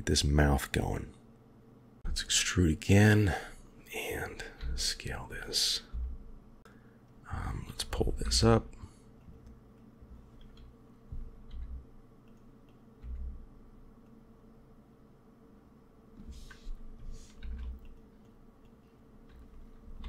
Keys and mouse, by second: 2.0 e, 4.5 s, 6.6 click, 8.1 g, 9.7 click, 11.4 g, 12.7 click, 17.3 ctrl+r, 18.6 click, 19.9 g.